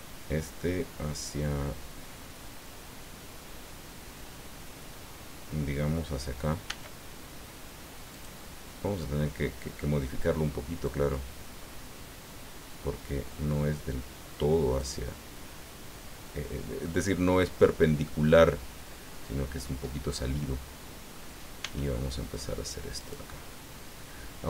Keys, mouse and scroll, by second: 6.7 e, 8.1 click, 9.0 middle click, 10.8-15.0 drag, 16.8 middle click, 18.0-21.3 middle drag, 21.6 s, 23.0 click, 23.5-24.4 middle drag.